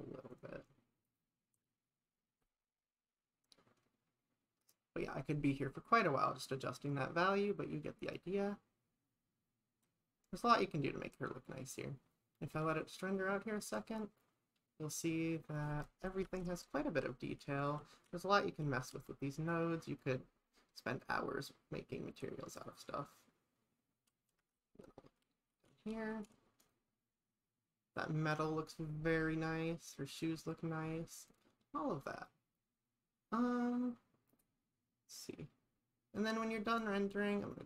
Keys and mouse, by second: 1.1 click, 16.3 shift+`, 24.5 shift+`.